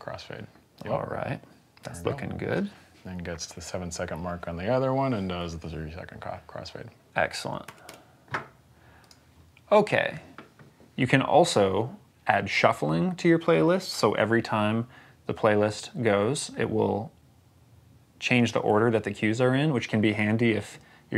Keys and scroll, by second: 7.5 Escape.